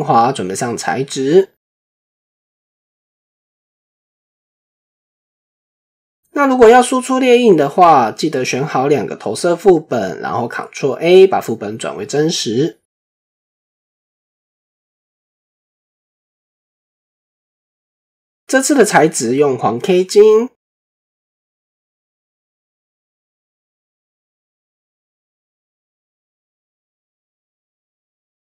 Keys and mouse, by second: 2.2 shift+middle click, 4.3 Tab, 6.0-6.9 shift+middle drag, 8.7 click, 11.1 ctrl+a, 18.2 click, 19.4 typing, 23.0 click, 25.3 KP_0.